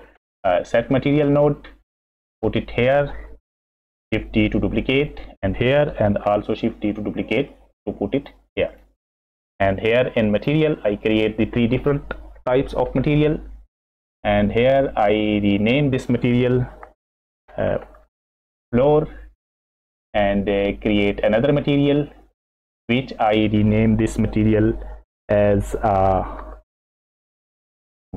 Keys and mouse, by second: 4.1 shift+d, 6.2 shift+d, 7.7 click, 8.7 click, 10.3 click, 15.3 click, 15.5-19.6 drag, 18.2 o, 21.6 click, 22.8-28.1 drag.